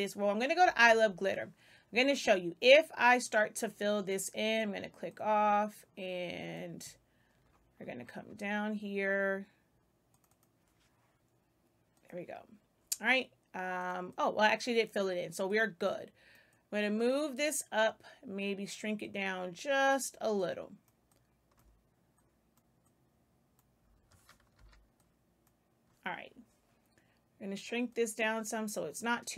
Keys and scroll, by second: 0.7 Return, 23.8 space, 24.5 z.